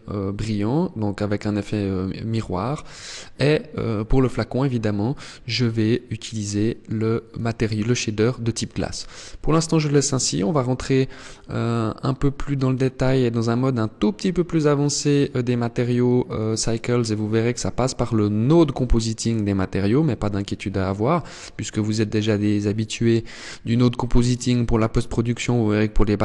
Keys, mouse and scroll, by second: 5.2 click.